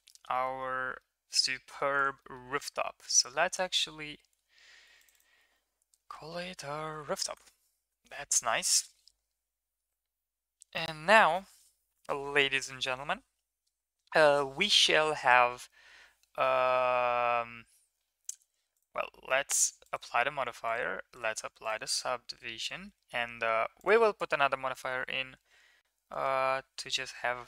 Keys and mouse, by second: 0.1 middle drag, 0.3 middle click, 1.0-1.8 middle drag, 2.2 middle click, 4.3 KP_Decimal, 5.1-7.3 drag, 6.3 o, 18.7 click, 19.5 click, 19.9-20.7 drag, 21.2-21.7 drag, 23.8 click, 24.2 Tab.